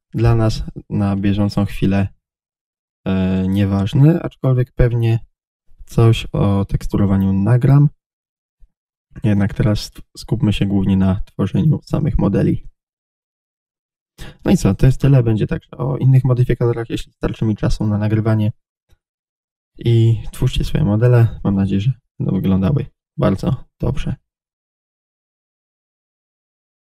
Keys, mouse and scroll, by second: 1.2 click, 1.4-1.7 scroll down 1, 2.1-5.8 middle drag, 23.6 middle click.